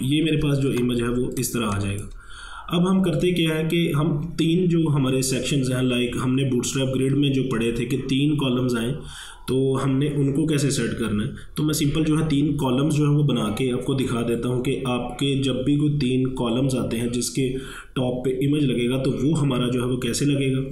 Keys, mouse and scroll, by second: 0.7 ctrl+1, 1.2 space, 1.4 click, 1.7 space, 1.7 click, 1.8 space, 2.1 space.